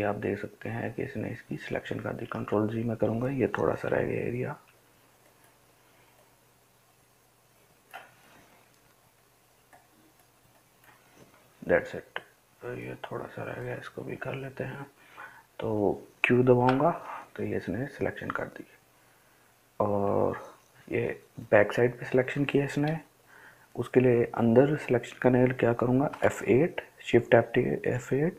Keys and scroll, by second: 2.2 ctrl+z, 3.9 [, 4.4 [, 4.7 [, 16.6 q, 26.1 shift+F8.